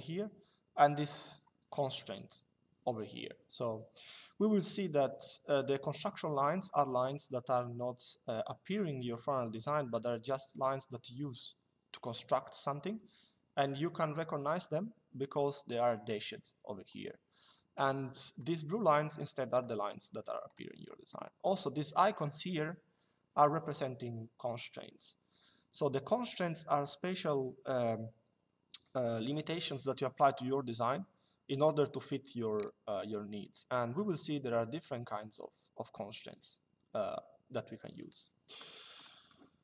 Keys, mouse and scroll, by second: 0.7 click, 17.5 click, 19.2 click, 22.2 click, 38.7 click.